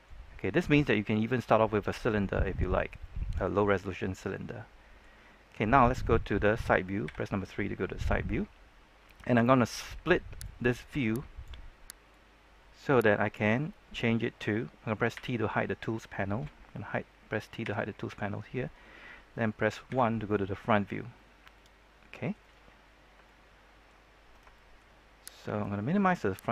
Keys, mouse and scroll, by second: 0.2-1.1 scroll up 1, 1.1-2.7 middle drag, 2.7 scroll down 1, 2.9-4.3 middle drag, 7.0 KP_3, 10.4-13.4 drag, 15.1 t, 19.8 KP_1, 21.0-21.3 scroll up 1, 21.5 shift+middle click, 22.7-23.1 scroll up 1, 23.2 shift+middle click, 23.9-24.4 scroll up 1, 24.5 shift+middle click, 25.5-26.5 drag.